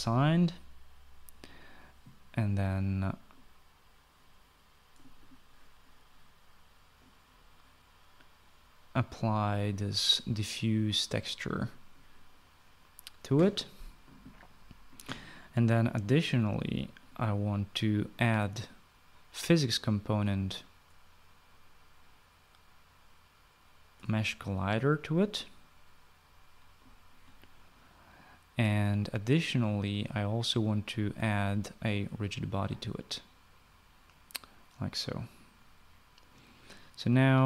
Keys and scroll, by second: 0.5 f.